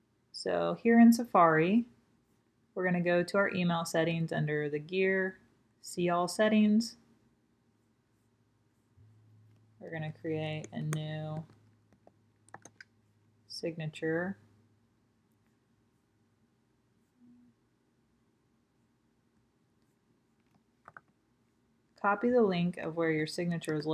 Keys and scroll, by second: 12.8-15.0 typing, 23.6 super+t.